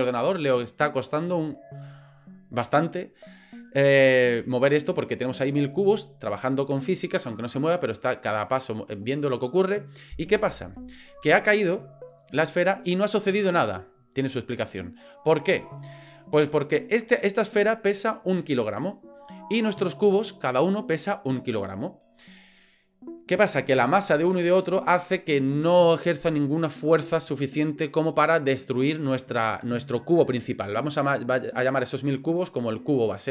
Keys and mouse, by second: 12.4 click.